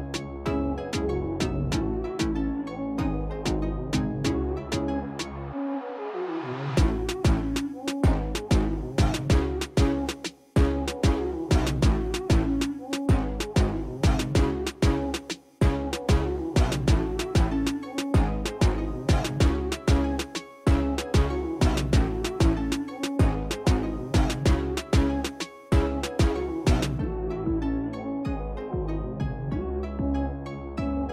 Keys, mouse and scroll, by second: 0.3 click, 2.5 click, 3.3 middle click, 4.0-4.3 middle drag, 5.3 click, 8.2 KP_1, 8.4 KP_0, 9.2 Return, 9.9-11.5 middle drag, 12.6 click, 16.8 middle click, 17.1-17.5 scroll down 3, 17.6 middle click, 18.3 middle click, 19.1 middle click, 19.3 middle click, 19.5 middle click, 19.8 middle click, 21.2 F8, 21.3 middle click, 21.6 middle click, 22.1 middle click, 24.1-26.6 shift+drag, 28.5 shift+click, 29.9-31.1 shift+drag.